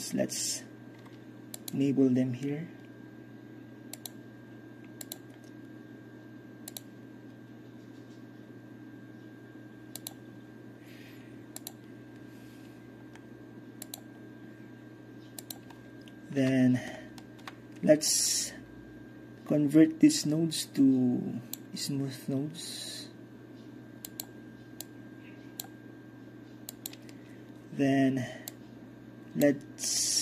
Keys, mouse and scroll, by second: 0.3-1.3 scroll down 2, 2.2-4.0 scroll down 2, 2.7-5.6 middle drag, 4.0-6.7 scroll down 1, 6.7-7.1 drag, 7.1-8.3 scroll down 2, 8.3 scroll down 1, 8.5-10.1 scroll up 2, 10.1-10.7 drag, 10.1-13.3 scroll up 1, 10.7 middle click, 11.0 click, 11.0-11.3 middle drag, 11.7-12.8 middle drag, 13.3-13.8 scroll down 1, 13.8-14.3 scroll down 1, 13.9-16.8 middle drag, 14.3-15.4 scroll up 1, 15.4-16.2 scroll up 1, 17.0-21.7 ctrl+middle drag, 17.0-19.3 ctrl+scroll down 1, 21.7-22.3 drag.